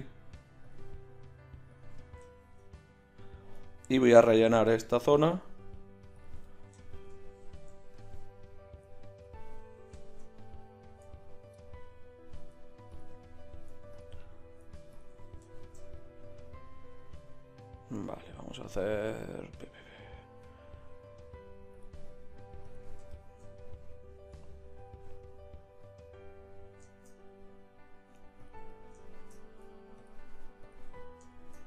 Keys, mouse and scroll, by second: 3.3-11.0 middle drag, 12.9-17.0 middle drag, 21.7-23.1 drag, 23.1-24.5 middle drag, 24.8-26.6 middle drag, 28.4-31.6 middle drag.